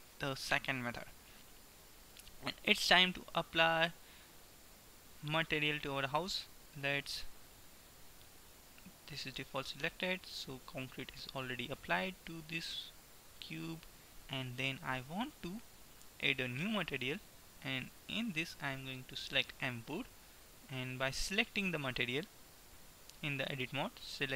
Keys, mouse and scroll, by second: 0.5-3.5 middle drag, 5.0 middle click, 5.6-7.5 drag, 7.5-10.5 middle drag, 10.5 Tab, 11.1 Tab, 16.6-20.0 drag, 22.0-23.5 drag, 23.0 Tab, 24.1-24.3 drag.